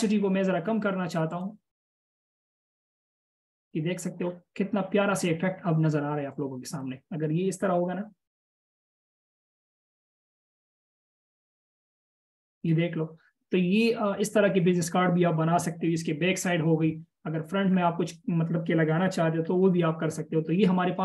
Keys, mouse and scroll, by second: 7.0 double click, 8.0-8.4 alt+shift+scroll up 1, 9.8 ctrl+0, 10.8-11.4 scroll down 1, 11.4-12.2 alt+shift+scroll down 1, 18.0-18.8 scroll down 1, 19.4-20.4 alt+shift+scroll down 1, 20.4 alt+shift+scroll up 1.